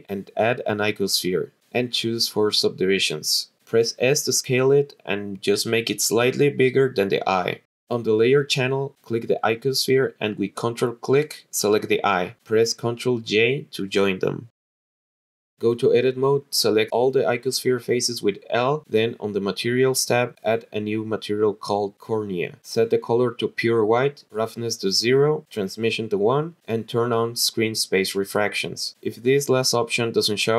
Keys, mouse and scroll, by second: 2.1 drag, 2.9 click, 3.7 s, 7.3 click, 8.9 click, 12.1 ctrl+click, 13.4 ctrl+j, 15.6 Tab, 17.0 click, 17.4 click, 17.9 l, 19.7 click, 20.9 click, 21.4 click, 21.9 click, 22.9 click, 24.6 click, 25.4 scroll down 7, 26.0 click, 26.6-30.0 scroll down 7.